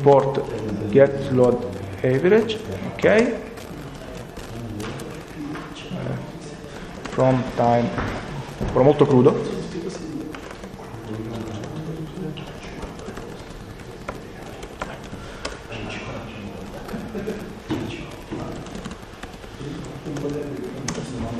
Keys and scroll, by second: 1.2 d, 2.9 Return, 3.1 Return, 4.0 w, 4.9 ctrl+BackSpace, 6.5-7.5 typing, 10.2 Return, 11.2 Up, 12.2 Return, 12.4-15.8 typing, 18.0-21.3 typing, 20.8 Return.